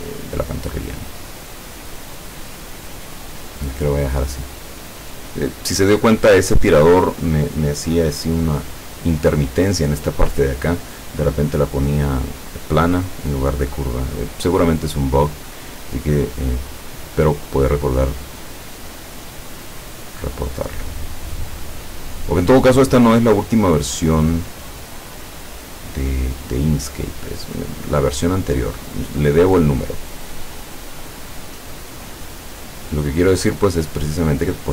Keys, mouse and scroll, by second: 2.1-3.8 drag, 5.1 click, 20.7 click, 22.1 click, 25.7 click, 33.0 click.